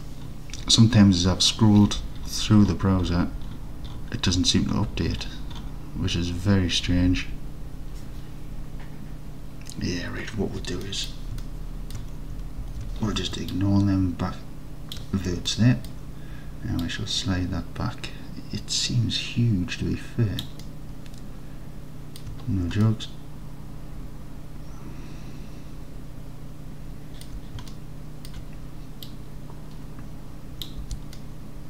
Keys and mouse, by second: 10.9 middle click, 11.5 alt+middle click, 12.7 alt+z, 13.7-15.0 ctrl+drag, 15.5-15.9 alt+middle drag, 16.9-20.5 drag, 20.7-22.2 alt+middle drag, 22.9-25.5 alt+middle drag, 25.5-27.3 alt+drag, 27.8 alt+click, 29.1-30.7 drag, 30.9 alt+z, 31.2 alt+click, 31.3 alt+click, 31.5-31.6 alt+drag.